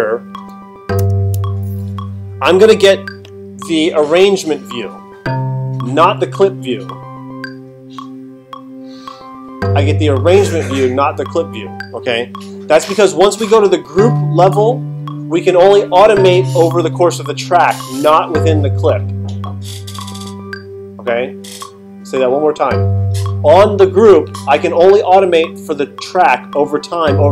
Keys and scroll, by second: 1.0 alt+super+8.